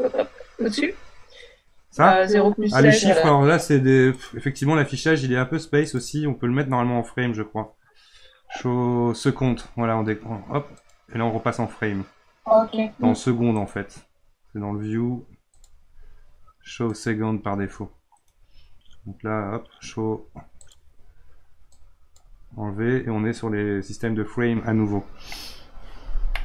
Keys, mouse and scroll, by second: 4.1-5.8 right drag, 5.8 click, 13.5-15.5 right drag, 15.5-18.1 drag, 18.1-20.6 right drag, 20.6-23.6 drag, 26.3-26.4 middle drag.